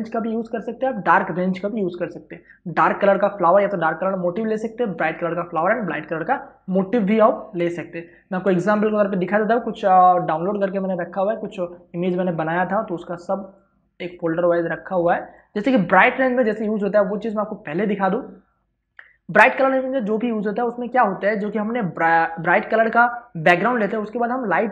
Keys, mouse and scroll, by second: 8.7 ctrl+o, 10.0-14.8 drag.